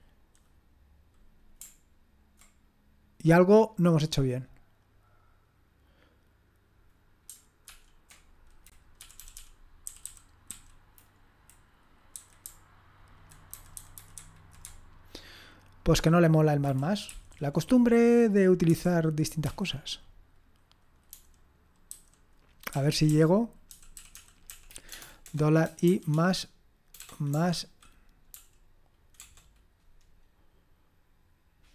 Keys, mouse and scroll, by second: 7.7 ctrl+p, 9.0 Up, 9.1 Up, 9.3 Up, 9.9 Down, 10.0 Down, 10.5 Down, 10.7 typing, 12.4 Left, 13.1 Left, 13.4 Left, 13.5 Left, 13.7 Left, 13.9 Left, 14.2 Left, 14.6-16.6 Left, 17.0 Up, 17.3 Up, 19.4 Up, 21.9 Down, 22.7 Up, 22.9 Up, 23.1 Up, 23.7 Right, 23.9 Right, 24.1 Right, 24.5 Right, 24.9 BackSpace, 25.2 BackSpace, 25.9 =, 28.3 `.